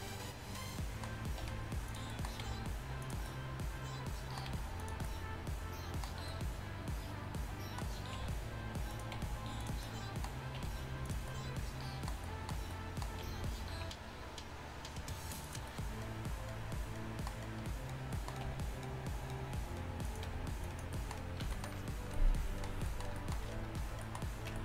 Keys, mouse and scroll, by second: 0.0-0.7 middle drag, 1.5 r, 2.5 g, 4.6 g, 8.2 r, 9.2 g, 10.6 r, 11.1 g, 13.3 g, 20.1 r, 20.3 g, 21.5 a.